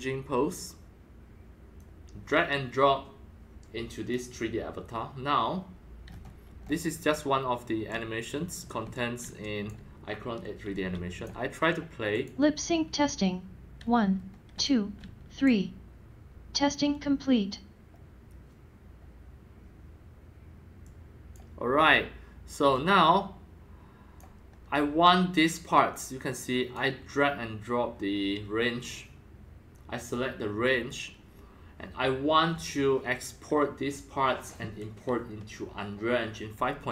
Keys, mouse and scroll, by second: 1.7-6.0 drag, 6.0-6.6 scroll down 5, 6.6 scroll up 7, 7.6-11.4 typing, 7.8 scroll up 1, 7.9-8.9 drag, 8.9-9.8 drag, 10.7-11.2 drag, 11.4-13.8 drag, 13.8 scroll up 4, 14.1-14.4 scroll down 5, 14.2-15.5 typing, 14.6-15.4 drag, 17.2-20.5 drag, 20.8 click, 21.3-22.0 drag, 22.7-24.2 drag, 25.0-26.7 drag, 28.6-31.8 drag.